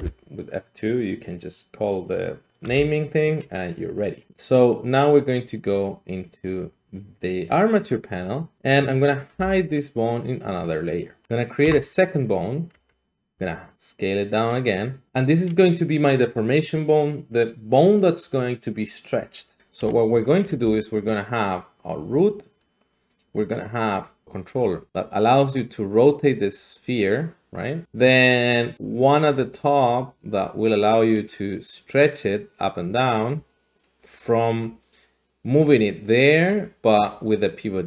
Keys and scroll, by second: 0.0 F2, 2.7 Return, 9.3 m, 11.6 a, 12.7 `, 13.3 s, 20.6 d, 21.1-37.8 d.